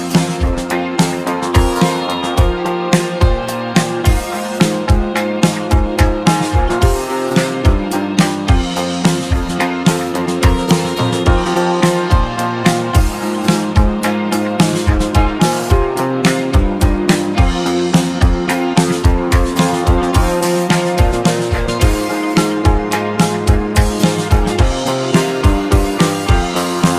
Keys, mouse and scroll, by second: 1.6 ctrl+b, 7.8-10.3 middle drag, 13.0-14.6 scroll down 1, 14.6-16.2 middle drag, 16.2 click, 17.7 ctrl+b, 21.6-22.8 middle drag, 22.8 e, 25.1-25.4 scroll down 1, 25.4-26.9 middle drag.